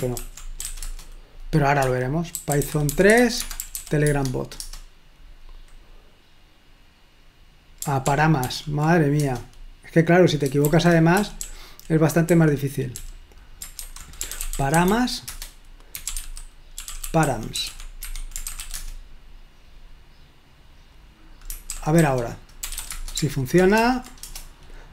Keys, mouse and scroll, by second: 0.4-4.3 typing, 4.6 Return, 8.1 ctrl+p, 8.5 ctrl+p, 9.2 Return, 10.5-13.8 typing, 14.9-19.3 typing, 15.6 Return, 18.4 Escape, 22.2-23.3 typing, 23.7 ctrl+p, 23.9 ctrl+p, 24.2 Return.